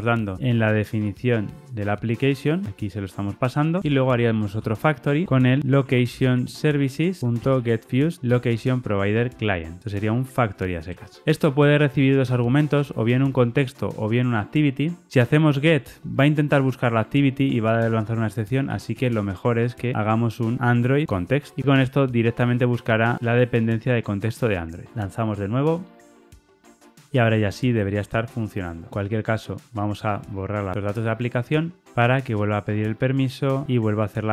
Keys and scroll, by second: 5.0 Return, 7.2 Return, 12.2 super+p, 24.9 ctrl+r, 24.9 shift+F10.